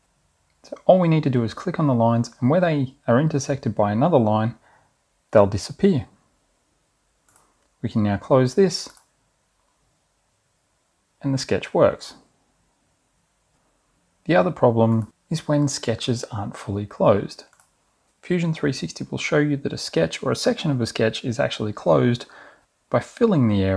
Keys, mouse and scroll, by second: 0.4 click, 2.7 click, 3.7 click, 9.1 click, 10.7 click.